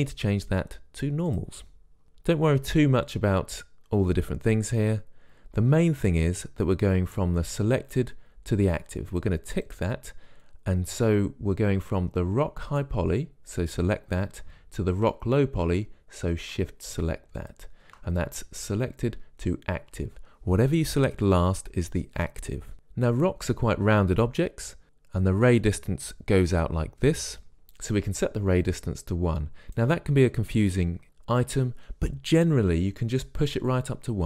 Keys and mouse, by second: 10.0-12.2 drag, 12.9-19.5 drag, 29.0-30.9 drag.